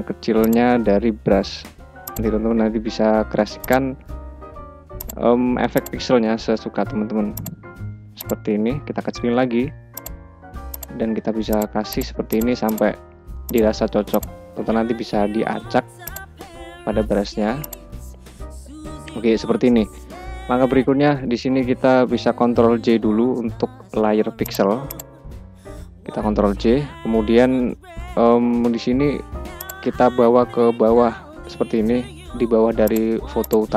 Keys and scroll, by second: 0.4 ], 2.6 [, 8.1 [, 14.2 ], 17.0 [, 25.8 ctrl+j.